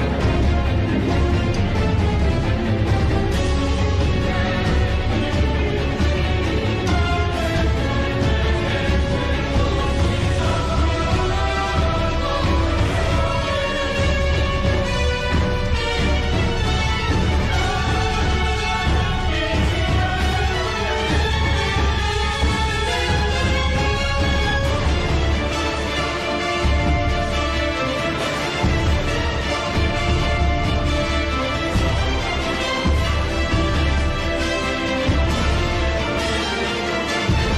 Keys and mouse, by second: 4.6 click, 5.8-6.8 drag, 8.0 click, 9.6 shift+d, 13.5 shift+d, 20.3 g, 31.5 click, 33.8 click.